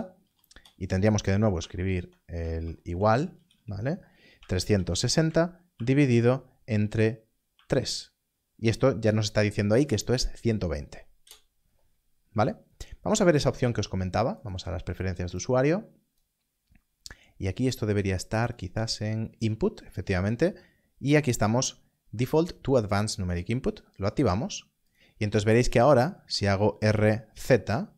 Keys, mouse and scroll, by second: 0.2 BackSpace, 0.4 BackSpace, 0.5 BackSpace, 1.6 shift+0, 3.3 BackSpace, 4.3 3, 5.7 shift+7, 7.5 3, 11.2 3, 11.2 Return, 13.5 Return, 18.5 click, 23.3 click, 24.9 click, 26.2 click, 26.8 r, 26.8 z.